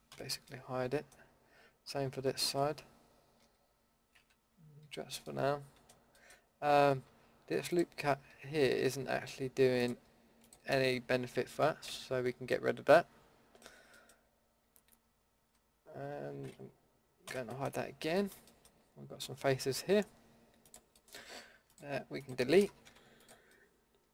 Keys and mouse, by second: 0.1 h, 2.4 l, 3.4 l, 4.8 h, 8.3 a, 11.9 ctrl+x, 15.4 alt+h, 17.3 h, 20.6-22.8 drag, 22.8 Delete, 24.0 middle click.